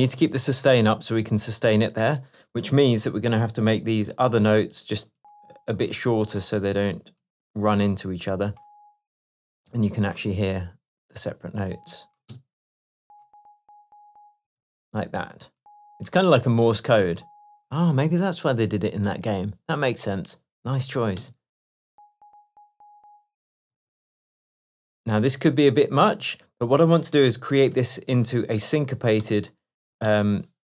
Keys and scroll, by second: 4.1 super+i, 12.4 space, 14.5 space, 21.6 space, 23.8 space, 27.8 super+i, 28.3 super+2.